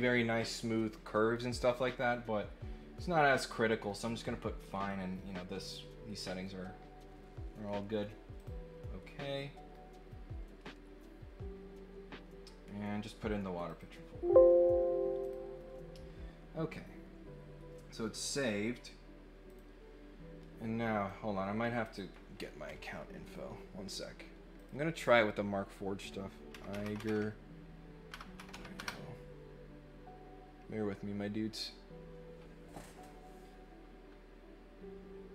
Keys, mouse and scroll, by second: 8.3 click, 13.6 click, 15.2 click, 19.4 click, 21.0 click, 21.9-23.3 drag, 24.5 click.